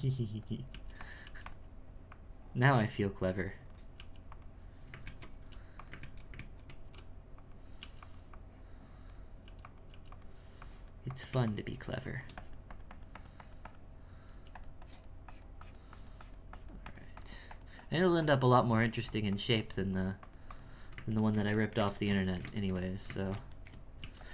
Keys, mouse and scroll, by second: 0.0 click, 0.7 f, 1.2 f, 2.1-3.9 drag, 3.9 f, 5.0 ctrl+2, 5.4 f, 6.0 ctrl+2, 6.3 ctrl+2, 6.8 f, 7.8 f, 8.3-9.4 drag, 9.4 f, 9.9 f, 10.6-14.3 drag, 14.8-21.2 drag, 21.2-24.0 ctrl+middle drag.